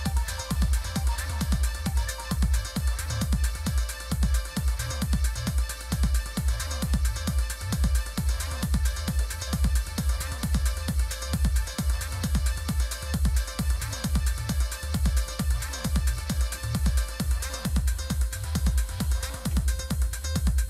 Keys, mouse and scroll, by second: 6.0-6.6 scroll up 2, 6.6-7.0 scroll down 2, 7.3-8.7 scroll down 1, 9.0 click, 10.4 click, 14.0 click, 14.9 click, 15.8-17.0 typing, 19.5 Return.